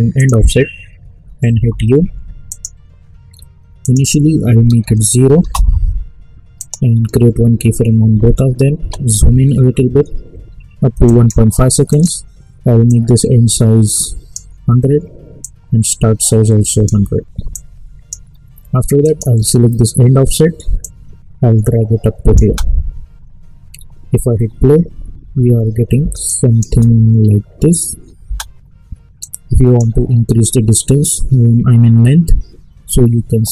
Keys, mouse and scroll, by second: 1.5 u, 2.5 click, 5.4 Return, 6.6 click, 8.9 =, 11.0-22.4 drag, 22.4 space, 25.9 space, 26.2 click, 26.7 space, 29.2-32.0 drag.